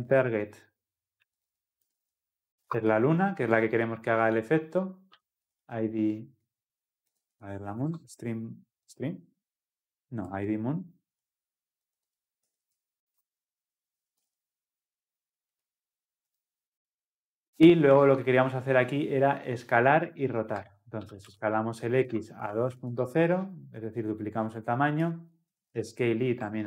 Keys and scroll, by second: 2.7 Return, 7.9 Return, 22.1 Return, 25.5 Tab, 26.4 Return.